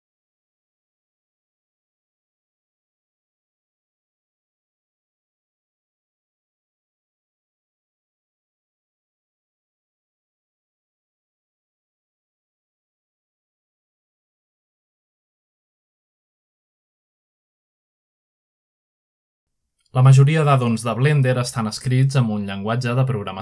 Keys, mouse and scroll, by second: 1.7-5.2 drag, 7.6-11.0 drag, 11.2-11.7 scroll down 1, 13.1 middle drag, 13.7 shift+middle click, 14.3-16.7 middle drag, 17.3-20.5 drag, 20.5 middle click.